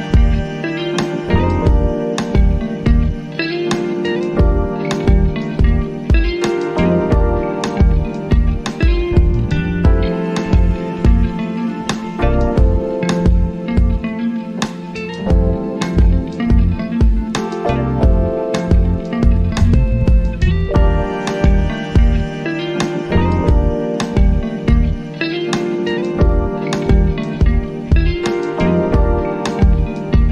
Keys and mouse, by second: 16.4 click, 20.1 click, 22.5 click, 26.2 typing, 28.5-30.3 drag.